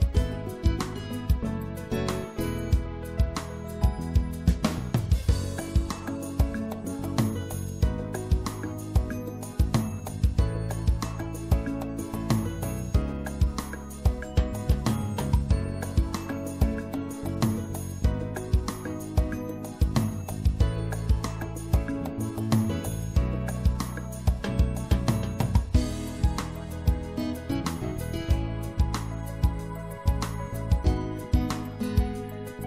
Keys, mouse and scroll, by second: 4.2 c, 7.2-11.0 drag, 8.4 right click, 11.8-15.2 middle drag, 14.7 z, 15.2-16.3 drag, 26.4-27.9 middle drag, 29.0-30.6 middle drag, 30.6 click.